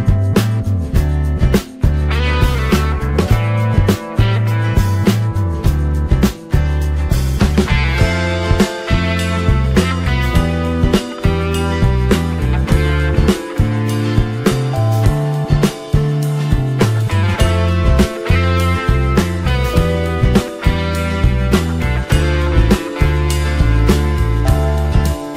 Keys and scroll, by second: 21.4 ctrl+t.